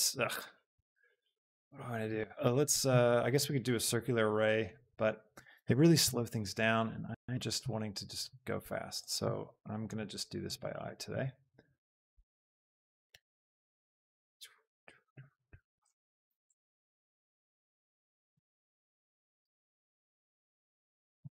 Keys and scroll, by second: 6.2 shift+Num_Lock, 7.2 shift+Home, 8.8 s, 9.2 g, 12.8 shift+d, 13.2 Escape, 13.6 g, 13.9 x, 16.5 shift+d, 18.7 shift+d, 19.1 Escape, 19.4 g, 19.8 z.